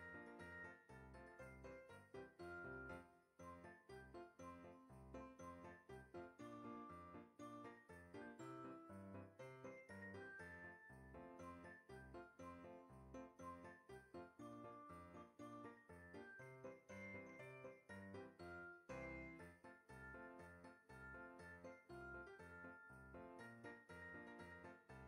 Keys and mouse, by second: 0.1 g, 3.8 click, 4.1 r, 6.0 click, 6.3 g, 7.2 click, 7.4 r, 9.4 click, 10.5 g, 12.1 click, 13.3 g, 13.9 click, 15.0 g, 16.1 click, 16.9 g, 19.8 click, 20.9 middle click, 22.4 ctrl+r, 22.9 click.